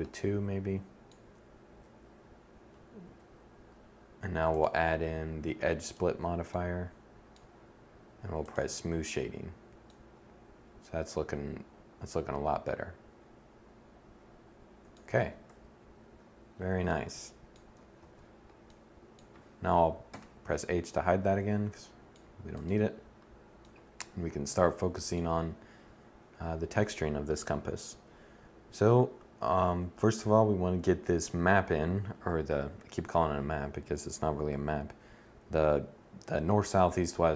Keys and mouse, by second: 2.5 1, 11.3 middle click, 14.6 z, 15.0 KP_1, 15.5-16.5 middle drag, 16.7 middle click, 17.4 z, 19.5 h, 21.9-23.0 drag, 31.8 7.